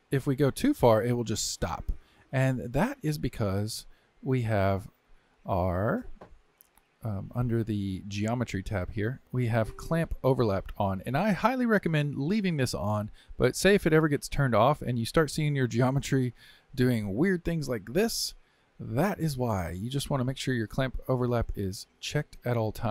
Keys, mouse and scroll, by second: 4.4-10.9 drag, 13.7 click, 15.3-18.3 drag, 21.8 click.